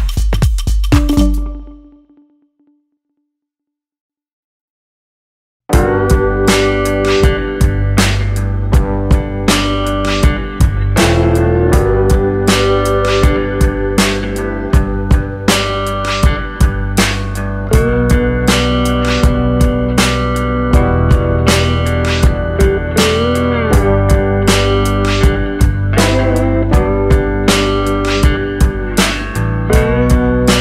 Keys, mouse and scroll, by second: 0.2 click, 2.8 click, 5.5 Tab, 5.9 scroll down 1, 6.0 middle click, 8.0 KP_1, 8.8 shift+d, 10.1 r, 12.9 g, 15.7 shift+d, 16.9 r, 17.7 g, 20.0 shift+d, 22.3-25.9 typing, 27.8 scroll down 4, 28.1 middle click, 29.7 scroll up 4, 29.9 shift+middle click, 30.5 click.